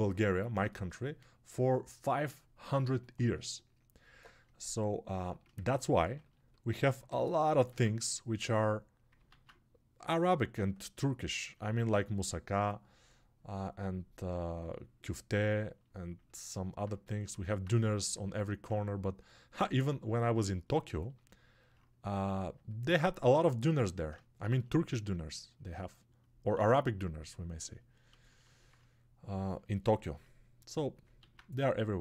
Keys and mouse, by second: 15.3-16.7 ctrl+alt+right drag, 16.7 click, 17.1 alt+right click, 17.5 click, 18.2 alt+right click, 18.6-32.0 drag.